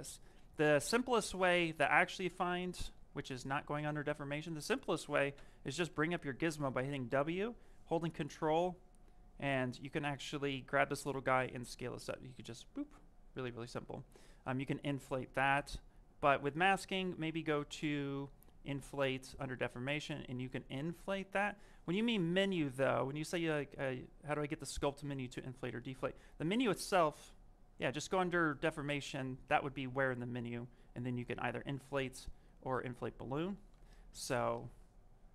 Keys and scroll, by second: 2.8 ctrl+z, 14.7 q.